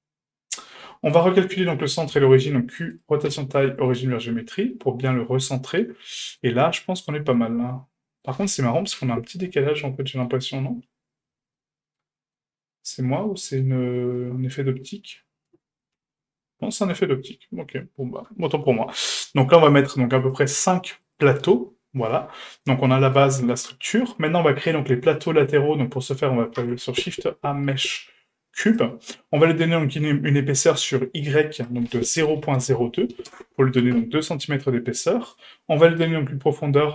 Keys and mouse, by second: 1.1 right click, 2.1 q, 3.0 q, 3.3 q, 4.4-6.4 middle drag, 6.8-7.1 shift+middle drag, 7.4 middle click, 9.0 KP_1, 10.0 middle drag, 11.5-12.0 middle drag, 12.3-13.6 middle drag, 14.2-15.5 middle drag, 16.0 KP_7, 17.1-17.7 middle drag, 18.0 shift+middle drag, 20.3-21.8 drag, 22.0-22.6 middle drag, 22.8-23.2 shift+middle drag, 23.3-23.7 middle drag, 25.3 middle click, 26.6 shift+a, 31.6-33.8 drag, 34.8-35.3 middle drag.